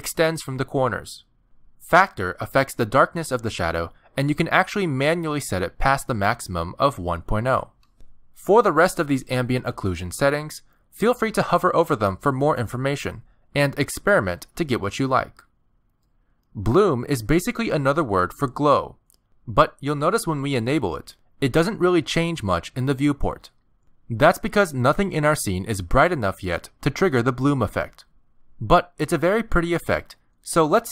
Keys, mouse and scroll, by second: 0.4 scroll up 3, 0.8 shift+middle click, 2.6 click, 5.2 click, 6.7 click, 10.5 click, 18.2 click, 18.7 click, 20.2 click, 21.4 click, 22.0-22.4 scroll down 5, 23.6 shift+middle click.